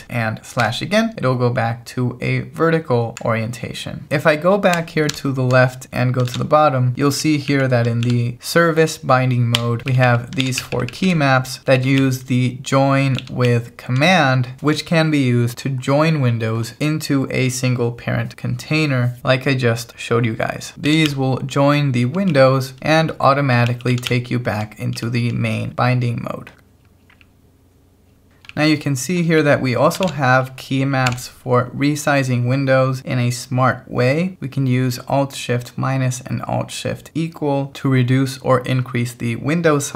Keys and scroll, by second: 0.7 alt+/, 5.1 alt+h, 6.3 shift+g, 6.9 k, 8.0 shift+v, 9.6 Escape, 9.8-14.0 typing, 20.5-21.6 typing, 22.8 Escape, 23.3-24.6 typing, 26.5 k, 27.9-29.0 typing, 30.0 shift+v, 31.1 j.